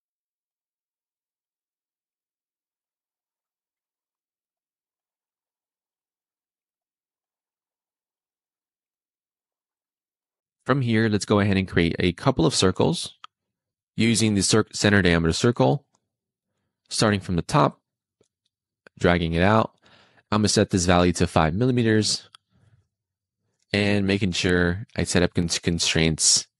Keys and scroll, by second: 0.0 d, 1.0 Return, 1.2 super+z, 1.8 5, 1.9 Return, 5.0 d, 6.2 5, 6.4 Return, 8.8 Escape, 20.9 5, 21.8 Return.